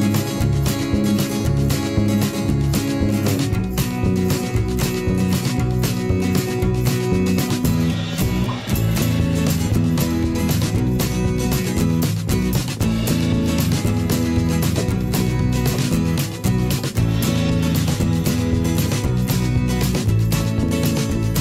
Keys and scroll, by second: 13.5 v.